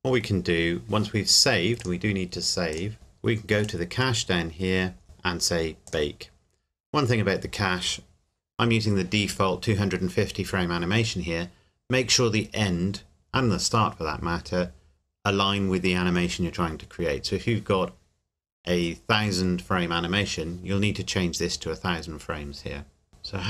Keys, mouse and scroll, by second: 0.2 scroll down 2, 1.8 click, 2.9-3.4 scroll down 1, 3.6 click, 4.7-5.9 scroll down 1, 5.9 click.